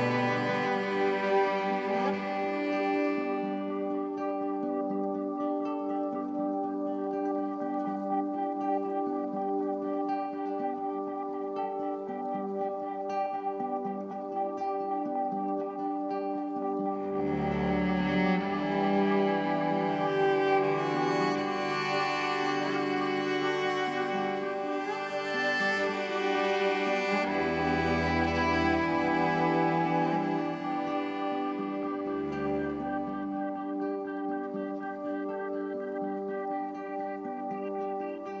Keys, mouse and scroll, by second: 1.3 ctrl+z, 2.1 shift+click, 5.9 click, 7.5 click, 11.4 ctrl+shift+g, 12.3 click, 15.1 shift+click, 16.4 ctrl+shift+g, 16.8 click, 22.3 ctrl+g, 23.1 shift+g, 24.1 shift+click, 24.8 shift+click, 26.3 shift+click, 27.1 shift+click, 28.6 shift+click, 29.8 shift+click, 31.3 shift+click, 31.9-38.4 shift+drag.